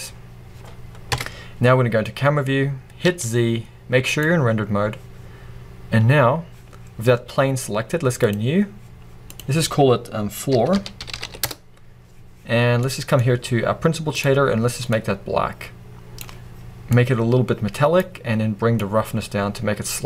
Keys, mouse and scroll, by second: 0.1-0.5 scroll down 1, 1.1 KP_0, 2.0-2.4 scroll up 1, 4.3 z, 8.4-15.0 drag, 11.5 o, 12.5 Return, 17.0-20.0 drag.